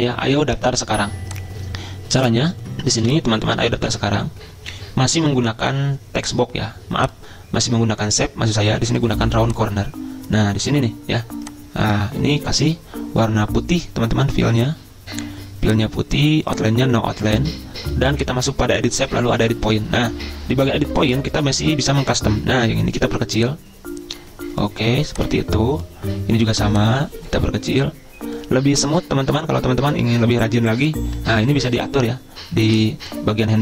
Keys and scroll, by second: 3.1 Delete.